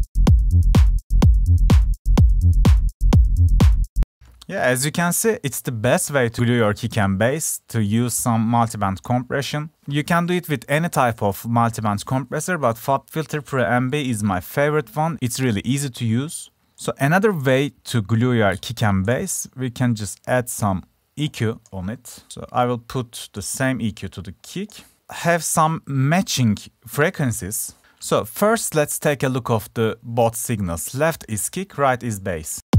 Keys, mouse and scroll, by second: 9.2-9.7 drag, 9.8 click, 14.8 right click, 15.1-18.0 right drag, 18.0 click, 20.1 Escape, 23.4 right click.